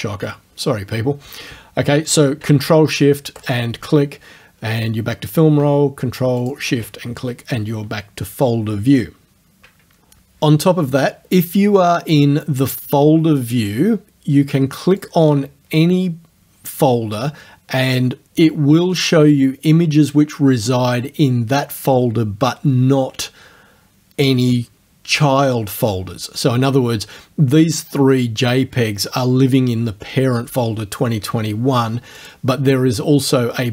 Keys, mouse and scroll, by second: 3.4 ctrl+shift+click, 6.5 ctrl+shift+click, 15.0 click, 32.2 click.